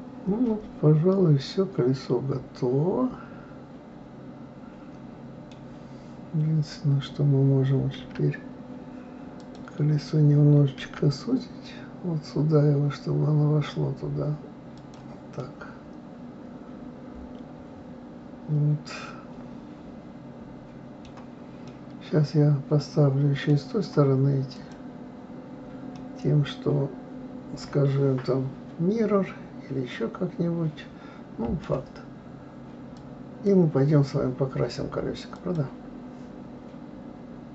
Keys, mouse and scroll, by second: 9.4 click, 10.8 s, 15.4-18.4 middle drag, 21.7-24.5 middle drag, 24.5 click, 25.9-29.1 middle drag, 32.9 click.